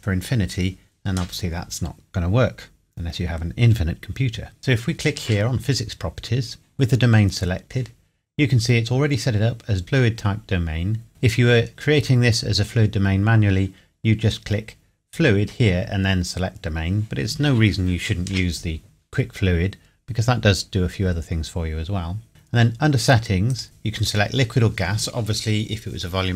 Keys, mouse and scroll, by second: 23.5 click.